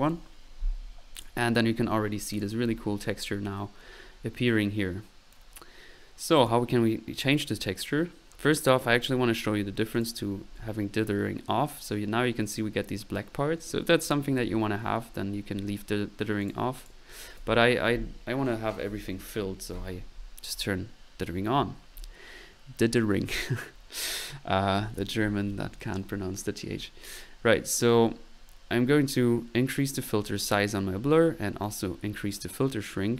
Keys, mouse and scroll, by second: 2.6 1, 5.3-6.6 drag, 6.9 click, 7.8 click, 10.1-10.5 drag, 16.4 click, 17.4 1, 27.9-30.1 middle drag, 31.6-33.1 drag.